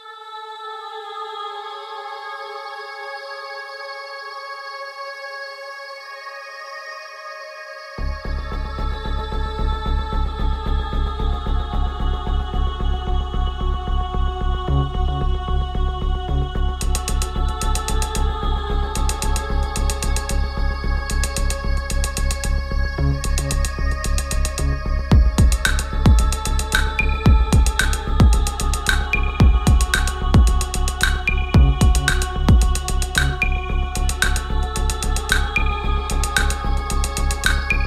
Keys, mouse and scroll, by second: 0.0-1.2 typing, 2.2 click, 3.6 ctrl+t, 4.4 click, 6.2 ctrl+t, 7.5 scroll down 1, 9.8 shift+Num_Lock, 9.8-10.4 scroll down 1, 10.4-18.1 shift+drag, 18.1 Up, 19.7 ctrl+t, 21.4-25.9 ctrl+drag, 25.9-34.6 ctrl+drag, 34.6 Down, 36.0 Return.